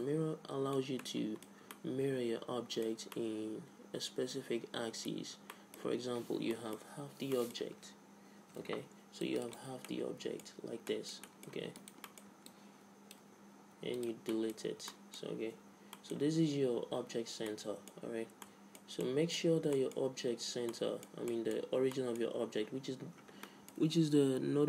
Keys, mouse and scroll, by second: 0.0-4.8 middle drag, 5.5-6.8 middle drag, 6.9 Tab, 8.4 ctrl+r, 9.3 click, 10.5 z, 11.8-14.3 drag, 12.5-13.7 right drag, 13.4 x, 14.3 middle click, 14.7 z, 15.6 Tab, 18.6-24.6 middle drag.